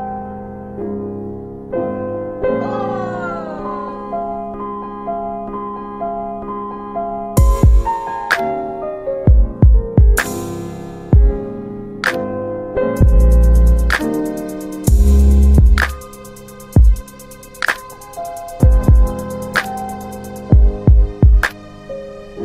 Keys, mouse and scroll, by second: 0.9 click, 1.3 scroll down 1, 1.8 middle click, 1.8-2.6 scroll down 2, 3.7 F3, 4.3 middle click, 4.4-5.2 scroll up 2, 5.8 click, 8.4 double click, 11.8 click, 13.0 middle click, 13.1 scroll up 1, 14.8 click, 17.3 click, 17.4 w, 20.7-21.1 typing, 22.1 Tab.